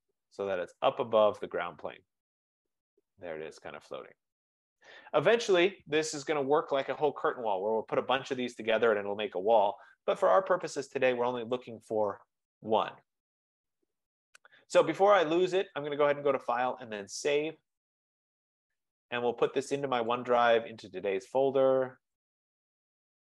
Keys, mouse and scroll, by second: 0.1 click, 4.9 right click, 7.1 click, 7.5 click, 11.6 right click, 12.0-12.5 scroll, 12.5 scroll up 2, 12.8 scroll down 1, 14.0 scroll up 1, 16.0 click, 17.1 scroll, 17.6 click, 20.2 click, 22.3 click, 22.5 click.